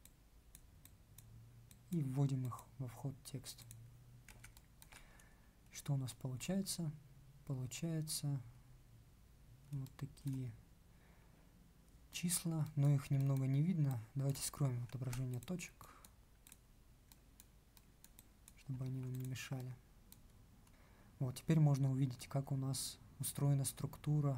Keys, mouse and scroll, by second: 14.9 ctrl+q, 18.8 ctrl+q.